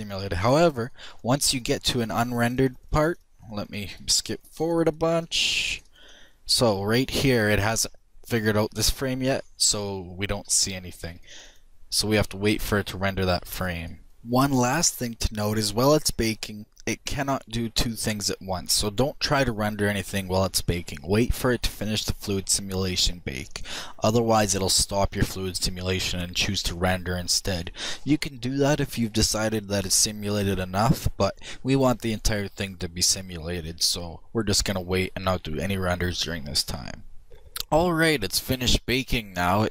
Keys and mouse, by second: 9.4-14.1 drag.